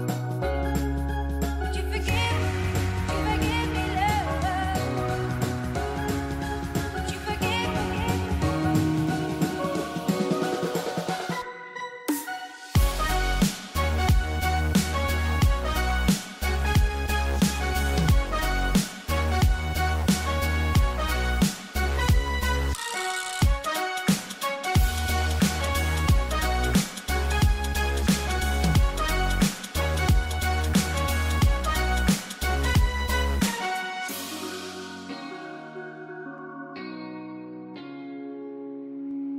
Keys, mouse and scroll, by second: 1.1 click, 3.1 ctrl+g, 5.2 alt+click, 6.1-11.4 typing, 7.0 click, 8.7 click, 9.5 click, 10.3 click, 15.3-15.9 typing, 15.7 click, 16.0 click, 17.4-19.1 typing, 17.5 click, 17.8 click, 18.6 click, 19.2 click, 20.6-21.9 typing, 20.8 click, 21.4 click, 22.6 click, 23.0-27.5 typing, 23.3 click, 26.7 click, 28.9 typing, 29.1 click, 36.2 space, 36.4 click, 36.8 space, 37.3 click, 38.8 space.